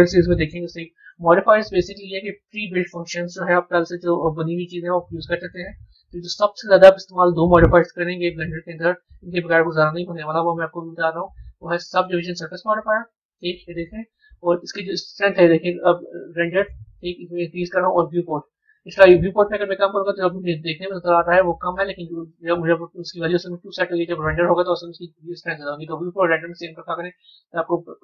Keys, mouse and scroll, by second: 0.9 click, 4.2 scroll up 1, 8.3 click, 12.9 scroll up 1, 14.8-23.3 drag, 24.6-27.8 drag.